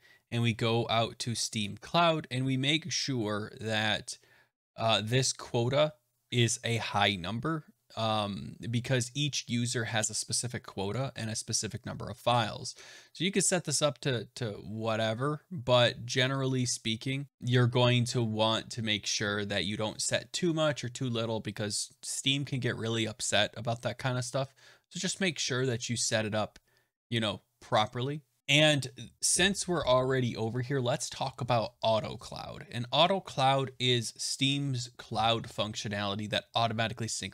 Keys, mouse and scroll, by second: 4.4 scroll down 1, 9.9 click, 11.1 click, 28.4-30.8 scroll, 30.8 scroll.